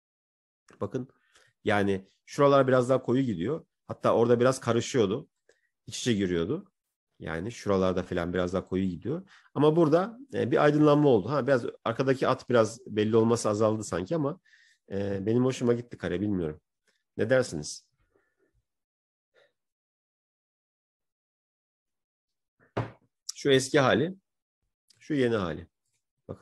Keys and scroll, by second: 12.3 ctrl+-, 13.7 ctrl+-, 15.2 ctrl+-.